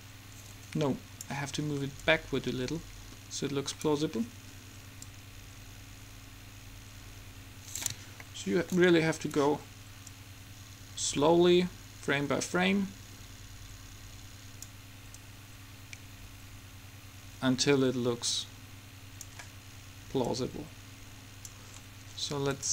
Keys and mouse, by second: 3.6 click, 5.2-6.8 drag, 8.3-10.3 middle drag, 10.3-12.1 drag, 15.4-17.0 drag, 20.4-22.1 drag.